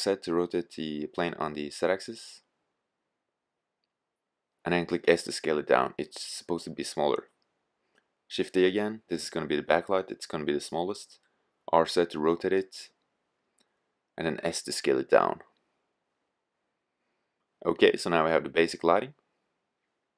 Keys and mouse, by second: 0.0 r, 4.1-4.6 drag, 4.6 s, 6.5 click, 7.2 shift+d, 9.7 click, 10.0 r, 13.5-14.3 drag, 14.3 s, 15.8 click.